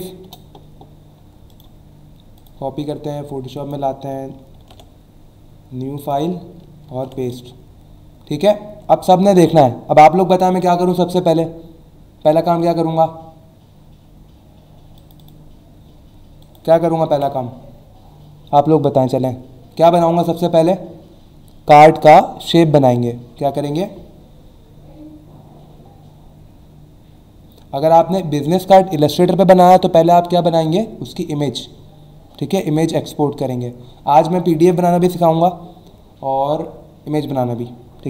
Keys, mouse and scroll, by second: 0.2 Return, 1.5 right click, 2.4 click, 3.6 click, 4.6 ctrl+n, 6.0 click, 6.9 ctrl+v, 7.5 alt+scroll down 1, 8.5 alt+scroll up 1, 15.0 click, 16.4 click, 17.1 Delete.